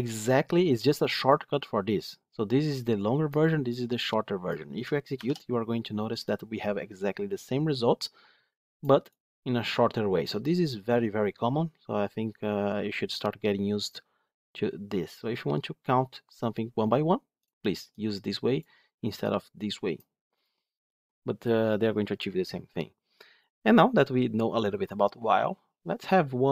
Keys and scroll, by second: 5.1 ctrl+shift+F10.